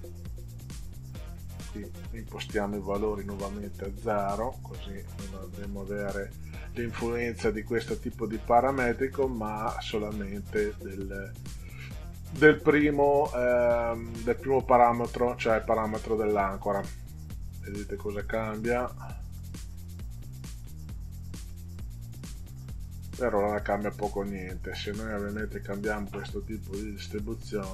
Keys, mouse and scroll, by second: 1.7 click, 4.0 click, 4.6 KP_0, 5.8 click, 16.8 click, 18.0 click, 19.4 click, 20.6 click, 21.5 click, 25.2 click, 26.8 click.